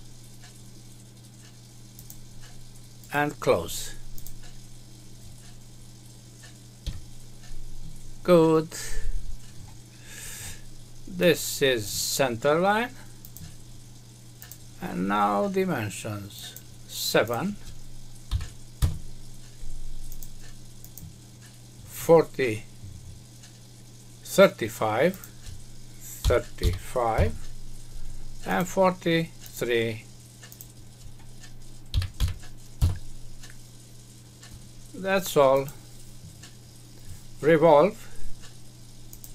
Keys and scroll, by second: 6.8 Escape, 18.8 Return, 27.1 Return, 32.7 Return.